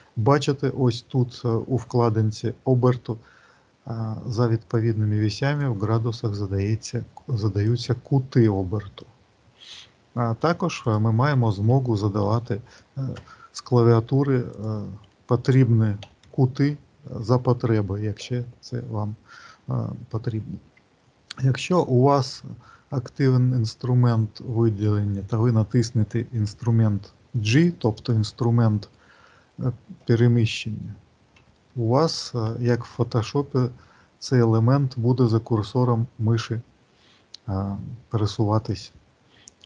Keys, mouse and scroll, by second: 4.7 click, 7.6 click, 14.4 click, 21.5 click.